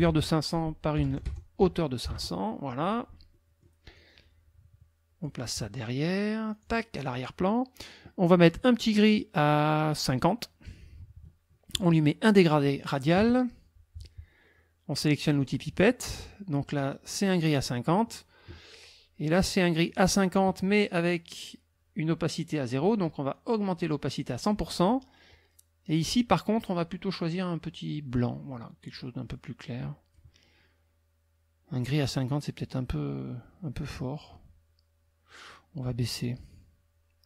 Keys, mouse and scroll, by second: 0.1 ctrl+a, 0.7-2.1 typing, 1.6 Tab, 3.3 middle click, 4.0-5.4 drag, 5.4 middle click, 6.5 click, 7.1 click, 10.0 click, 12.5 click, 15.3 click, 16.8 click, 19.9 click, 23.4-24.7 drag, 25.9 click, 27.4-30.3 drag, 33.8 click.